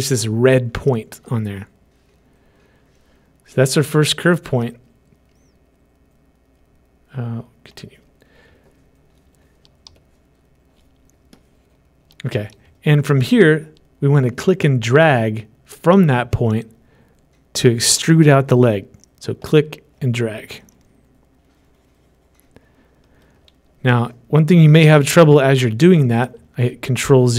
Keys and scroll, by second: 25.3 ctrl+z.